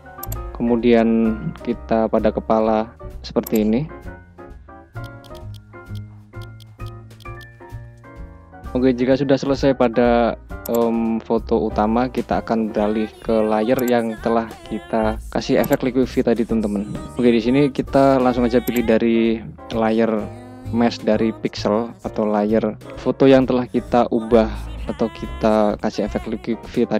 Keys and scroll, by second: 1.7 ], 3.8 [, 5.6 ], 5.9 [, 6.6 ], 6.9 [, 8.0 ].